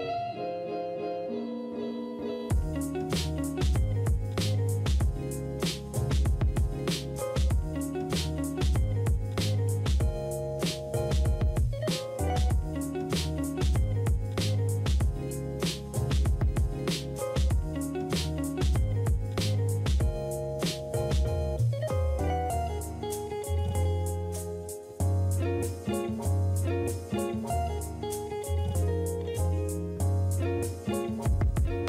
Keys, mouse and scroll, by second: 1.2 space, 2.2 space, 5.2 ctrl+d, 6.4 ctrl+d, 13.6 ctrl+z, 23.6 space, 24.7 space, 27.1 space, 28.6 space, 31.5 space.